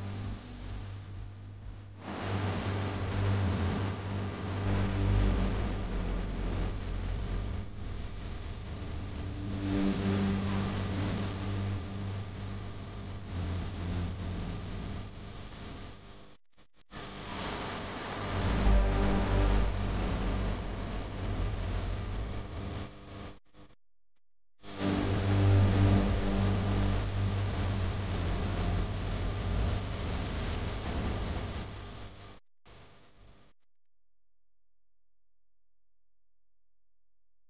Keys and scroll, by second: 4.6 ctrl+z, 8.8 ctrl+z, 12.1 x, 21.7 ctrl+z.